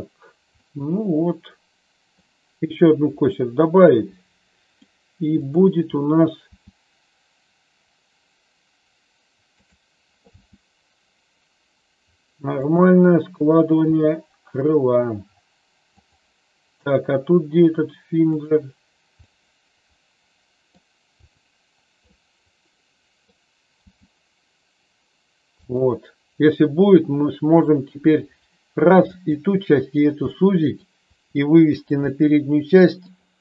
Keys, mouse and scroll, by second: 0.6-2.1 middle drag, 3.2-4.8 middle drag, 6.4 r, 9.5 click, 10.4 g, 14.0 r, 18.3 click, 19.2-20.7 middle drag, 21.2 click, 22.1-23.2 middle drag, 23.8 g, 27.8 r, 30.3 middle click, 31.2 r, 31.7 click, 32.1 middle click.